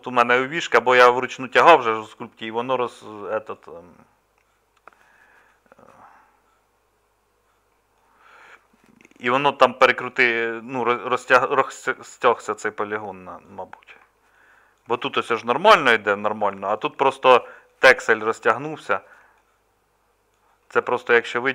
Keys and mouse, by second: 11.0 middle click, 12.4 middle click, 13.3 middle click, 13.7 middle click, 14.8-16.4 middle drag, 16.8 middle click, 17.9 middle click.